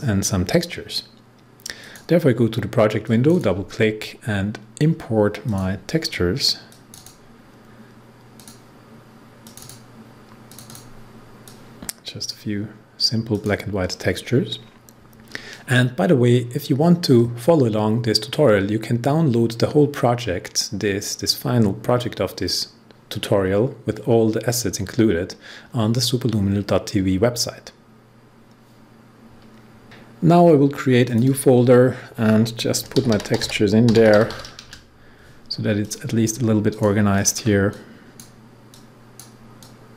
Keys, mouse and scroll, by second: 1.8-13.3 drag, 31.0 click, 32.7-34.7 typing, 35.8 click, 37.1-39.9 shift+drag.